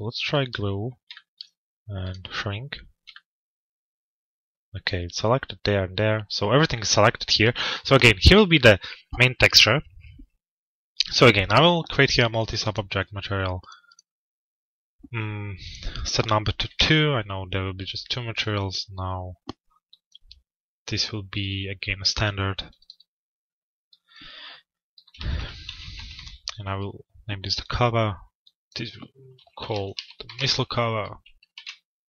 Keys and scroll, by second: 16.3 Return, 25.7 Return.